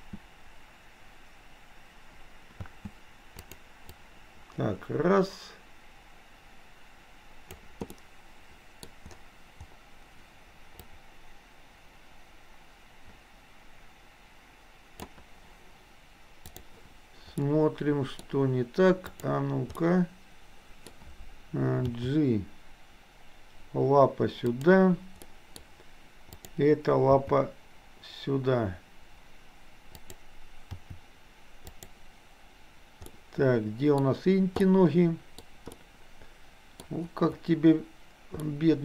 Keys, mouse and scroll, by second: 3.4 click, 3.9-7.7 drag, 7.9 middle click, 10.9-15.2 drag, 17.6 middle click, 19.8-20.8 middle drag, 21.9 g, 25.3 middle click, 25.6-26.3 scroll down 1, 26.3 click, 27.2 g, 30.8 r, 33.2 middle click, 34.1-34.7 scroll down 1, 34.7-35.4 middle drag, 35.7-36.8 middle drag, 38.6 middle click.